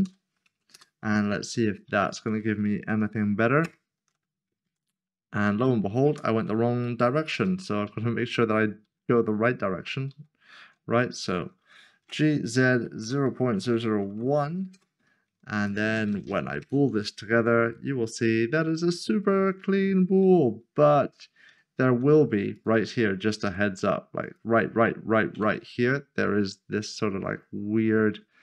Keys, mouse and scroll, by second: 0.0 typing, 0.7 Return, 3.6 ctrl+shift++, 4.6 Tab, 6.8 ctrl+z, 11.2 click, 12.4-14.1 typing, 14.7 Return, 15.6 shift+click, 16.6 ctrl+shift+KP_Add, 17.3 Tab, 18.2 middle click, 19.9 scroll up 1, 20.5 shift+middle click, 21.6 shift+middle click, 22.5 shift+middle click, 23.4 1, 24.2 click, 26.7-27.6 scroll down 1.